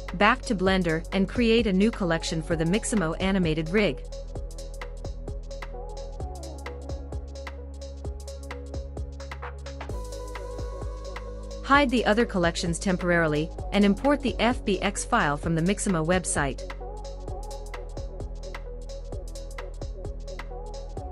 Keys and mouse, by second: 3.6-4.8 middle drag, 6.5-9.9 middle drag, 11.8 click, 12.8 click, 14.6-17.2 drag, 17.9 click.